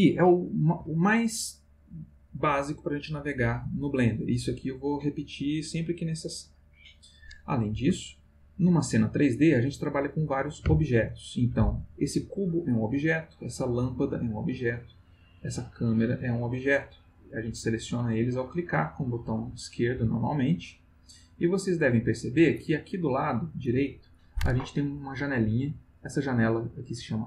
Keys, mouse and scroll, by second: 2.9-4.3 middle drag, 8.0-8.8 shift+middle drag, 13.5 click, 15.4 click, 17.3 click, 18.0 click, 18.7 click, 19.3 click, 19.9 click, 20.5 click, 21.4 click, 22.0 click, 26.0 click.